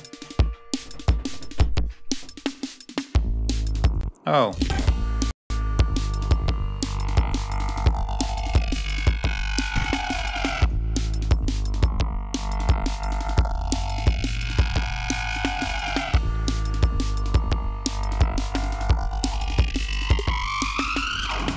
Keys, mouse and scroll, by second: 1.2 ctrl+scroll down 2, 1.5 ctrl+scroll up 2, 2.3-2.7 scroll down 2, 3.9 space, 4.2 click, 5.2-5.7 scroll up 2, 5.7 scroll down 2, 6.4 scroll up 2, 7.5 click, 8.4-8.7 scroll up 2, 10.9-11.4 ctrl+scroll down 4, 11.9-12.3 ctrl+scroll down 3, 12.4 ctrl+scroll up 2, 12.9 ctrl+scroll down 2, 13.8-14.9 scroll up 4, 15.3 scroll down 2, 15.8 ctrl+scroll up 3, 16.5 scroll down 2, 17.8 scroll up 2, 18.8 ctrl+scroll up 2, 20.9 ctrl+scroll down 2, 21.2 ctrl+scroll up 2.